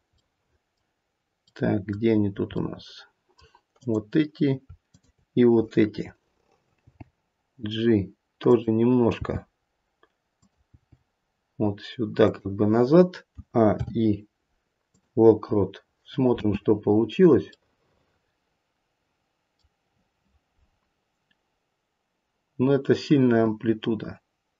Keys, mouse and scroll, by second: 0.2 middle click, 1.5 middle click, 2.1-2.5 scroll up 1, 2.5 middle click, 3.8 click, 4.9 shift+click, 6.7 g, 9.1 g, 10.8 g, 13.3 a, 13.7 i, 16.2 space, 16.8-17.1 scroll down 2, 17.5 middle click.